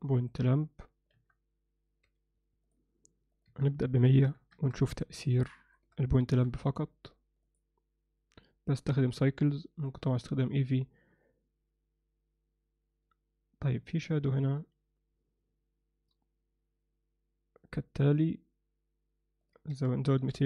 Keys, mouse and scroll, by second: 0.1 ctrl+alt+middle click, 1.1 KP_7, 2.0 g, 3.3-4.7 drag, 4.2 0, 4.8 drag, 6.4 KP_0, 19.4-20.4 drag, 20.3 0.